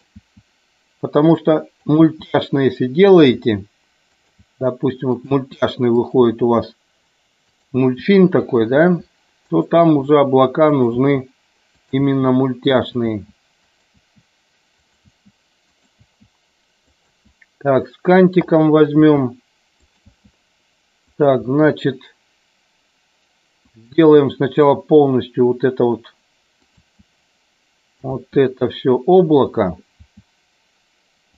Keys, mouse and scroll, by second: 0.3 e, 1.8 click, 2.2 e, 3.1 click, 3.4 e, 4.2 click, 4.4 e, 5.2 click, 5.4 e, 6.0 click, 6.2 e, 7.5 click, 7.8 e, 8.4 click, 8.9 e, 9.9 e, 10.8 click, 11.0 e, 12.0 e, 12.8 click, 13.2 e, 13.7 click, 14.1 e, 14.8 click, 15.2 e, 16.1 e, 16.9 click, 17.2 e, 19.0 e, 19.8 click, 20.2 e, 21.1 click, 21.6 e, 23.7 click, 24.0 e, 26.7 click, 26.8 e, 28.1 click, 28.2 e, 30.0 e.